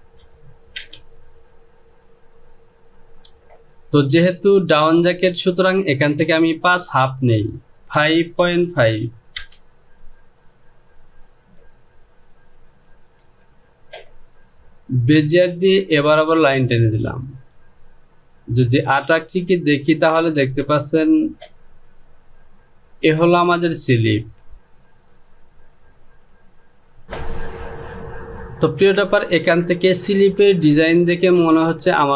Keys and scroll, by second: 0.7 Return, 8.3 KP_5, 8.7 KP_5, 9.3 Return.